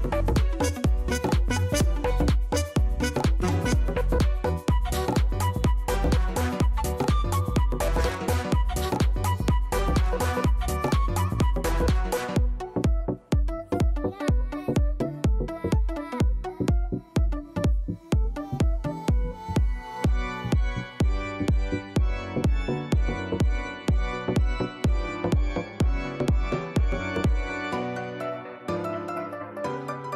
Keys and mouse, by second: 0.5 click, 3.9 click, 6.6 click, 8.6 click, 12.0 click, 13.0 click, 16.7 right click, 18.0 click, 20.5 click, 20.9 click, 27.9 click.